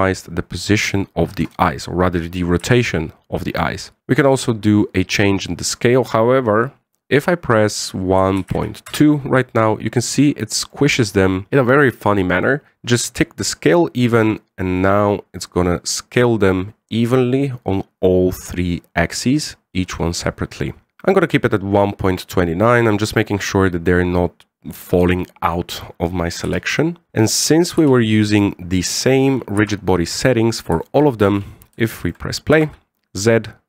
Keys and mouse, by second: 3.3 KP_1, 5.4-10.2 drag, 10.9-12.7 middle drag, 14.5 middle click, 15.5-21.0 drag, 22.4-23.3 drag, 24.4-25.7 drag, 27.1 KP_1, 28.5 KP_1, 30.3 KP_7, 31.6 shift+middle drag, 32.0 alt+a, 32.6-32.9 shift+middle drag, 33.4 z.